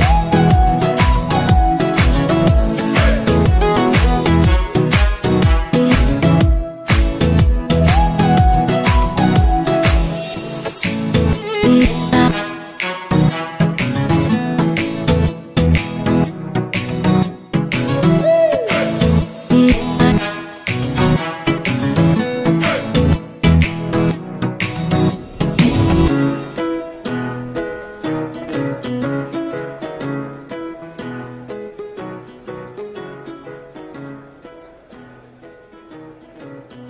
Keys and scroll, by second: 18.2 ctrl+alt+0.